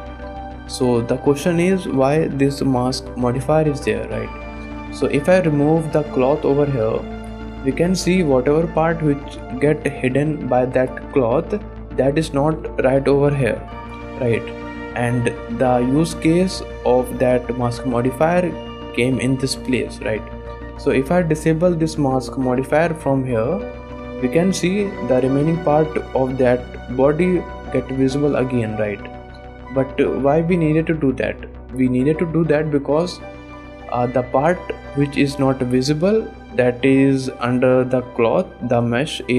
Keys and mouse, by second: 4.0 shift+click, 4.9 shift+click, 5.3 click, 7.2 click, 7.7 shift+click, 8.1 middle drag, 8.6 shift+middle drag, 9.2 middle click, 9.8 shift+middle click, 10.3 middle click, 11.7 shift+middle click, 12.0 shift+middle click, 12.9 middle click, 14.0 middle click, 14.6 shift+click, 18.8 click, 19.3 shift+drag, 19.8-20.2 drag, 20.3 shift+click, 20.7 click, 23.0 click, 24.3 shift+drag, 24.7 middle click, 25.1 middle drag, 25.7 middle click, 29.5 click, 30.4 shift+middle click, 33.9 click, 34.5 shift+click, 34.8 click, 36.4 click, 37.9 click.